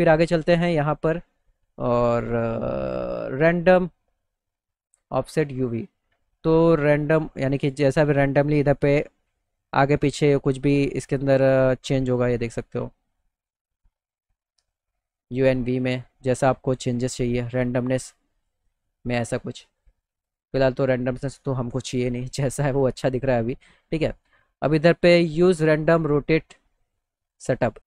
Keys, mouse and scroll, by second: 5.9-12.1 drag, 15.5-16.9 drag, 20.2 right click, 21.1 right click, 27.2 click.